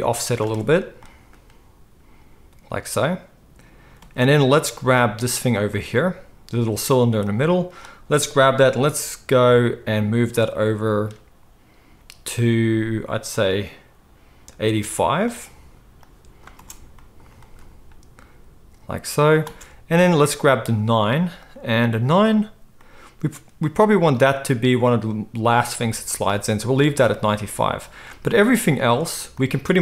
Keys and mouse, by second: 0.4 space, 4.0 space, 5.6-7.2 middle drag, 7.2-15.3 drag, 12.0 g, 15.3-16.0 middle drag, 16.0-20.3 drag, 16.6 space, 20.1 space, 20.3 middle click, 20.8 click, 21.0-26.1 middle drag, 26.1-28.9 drag, 28.9 middle click, 29.3-29.8 drag.